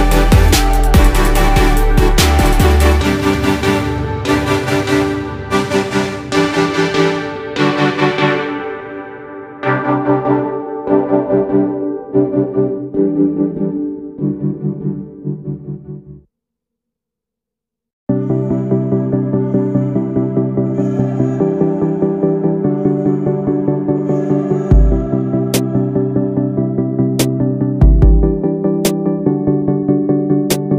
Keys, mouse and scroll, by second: 0.7 ctrl+z, 2.4 ctrl+z, 5.8 ctrl+z, 7.7 ctrl+z, 9.5 ctrl+z, 11.0 ctrl+z, 15.1 ctrl+z, 16.3 ctrl+z, 17.9 ctrl+z, 25.0 ctrl+z, 27.4 ctrl+z, 30.5 ctrl+z.